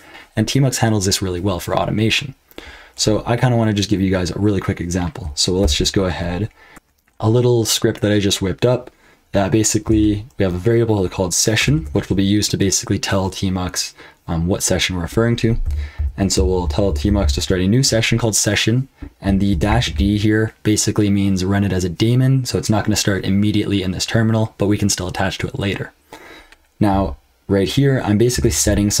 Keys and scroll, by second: 2.9 BackSpace, 5.6 ctrl+v, 6.7 typing, 9.9 shift+v, 11.6 ctrl+[, 15.4-19.9 typing, 26.9 j, 28.2-29.0 typing.